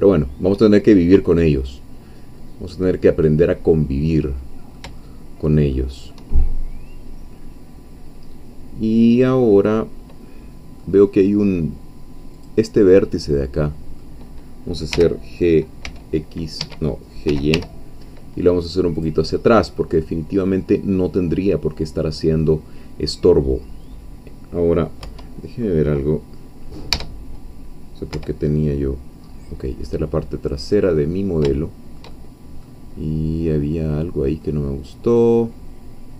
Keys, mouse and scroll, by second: 5.0 shift+middle click, 5.8 shift+middle click, 6.5-7.9 shift+middle drag, 8.2-9.8 middle drag, 9.9-10.8 scroll up 2, 10.8-12.3 middle drag, 12.3 click, 12.8-13.3 scroll down 2, 13.3 middle click, 14.9 g, 15.8 x, 16.6 Escape, 17.0-18.0 typing, 19.0 click, 19.2 scroll down 2, 19.5-22.6 middle drag, 22.8-23.2 scroll up 4, 23.2-23.8 scroll down 2, 24.8 scroll down 2, 25.0 1, 27.5 Caps_Lock, 28.1 1, 29.2-29.9 scroll up 2, 29.9-31.0 scroll up 1, 31.5-32.8 shift+middle drag, 32.9-34.4 scroll down 6, 34.4-36.1 middle drag.